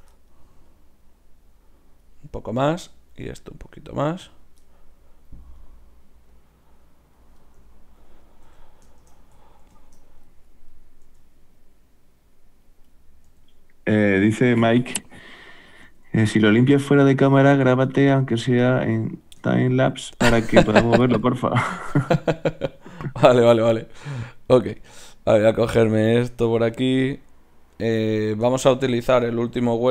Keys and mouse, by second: 0.7-2.7 drag, 2.7-4.5 right drag, 3.5-4.9 drag, 4.9 middle click, 6.3 click, 6.3 right click, 7.4 middle click, 8.5 a, 10.8-12.4 drag, 11.1 g, 13.4 r, 14.4 right click, 14.8 r, 15.9 click, 15.9 r, 16.6 g, 17.6 click, 18.6 g, 19.5-20.6 middle drag, 21.4-23.4 right drag, 23.4 r, 24.5 click, 24.5-29.9 right drag, 26.5 r.